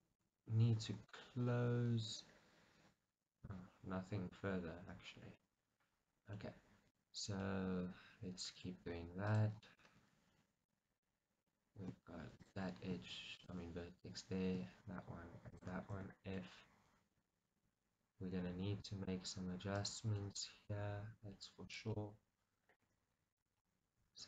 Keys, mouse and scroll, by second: 0.9 KP_1, 3.6-9.3 middle drag, 5.7-6.4 scroll up 2, 7.1-7.5 scroll up 2, 9.3 click, 9.7-12.5 middle drag, 12.5 shift+click, 13.4 shift+click, 13.7-15.6 middle drag, 15.6 shift+click, 16.0 f, 16.4-19.8 middle drag, 19.8 click, 20.3-21.8 middle drag, 20.8 g, 21.8 click, 22.0-24.2 middle drag, 22.9 g, 23.4 click.